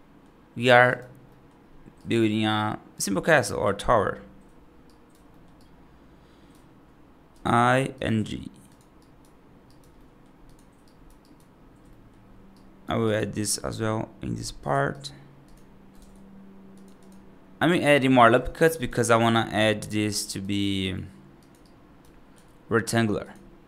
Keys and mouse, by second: 0.7 right click, 1.1 middle click, 1.8 right click, 3.3 right click, 4.7 right click, 5.2 middle click, 5.5 right click, 7.2 i, 8.0 g, 8.9 right click, 9.5 right click, 9.8 middle click, 10.7 right click, 11.1 right click, 11.7 middle click, 12.4 right click, 12.9 right click, 13.2 ctrl+r, 15.4 click, 15.8 ctrl+r, 17.6 right click, 18.5 3, 19.0 right click, 19.5 middle click, 20.1 right click, 20.7 i, 21.5 right click, 22.2 g.